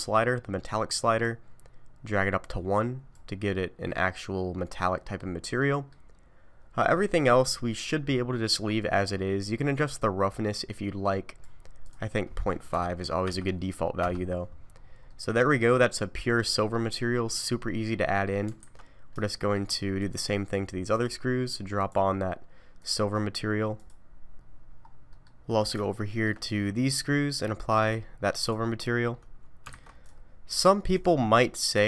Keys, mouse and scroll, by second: 1.2 click, 1.2-2.0 scroll down 3, 3.9 middle click, 5.6 middle click, 6.6-7.4 scroll down 4, 7.4-8.1 scroll down 1, 8.1 scroll down 2, 10.0 click, 10.0-10.4 scroll up 1, 11.8 click, 14.8 scroll down 4, 15.1 middle click, 15.7-16.7 scroll down 1, 16.7 middle click, 18.1 scroll down 2, 18.6 alt+a, 19.2 shift+middle click, 20.0 click, 20.9 click, 22.8 click, 23.8 click, 24.2 shift+middle click, 24.8 scroll down 3, 25.1 middle click, 25.5 scroll up 3, 25.8 shift+middle click, 26.8 click, 27.9 click, 28.8 scroll up 1, 29.7 alt+a, 30.1 click, 30.9 click.